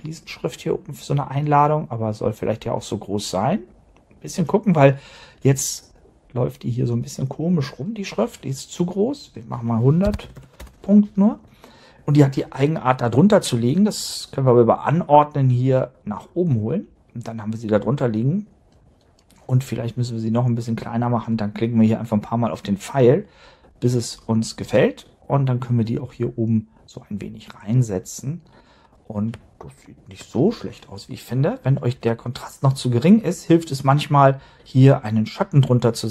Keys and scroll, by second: 10.3 0, 10.6 Return.